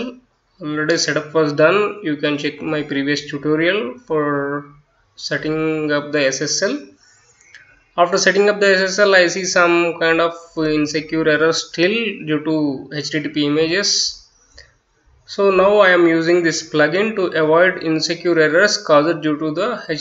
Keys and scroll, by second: 0.0-1.4 typing, 2.8-19.7 typing.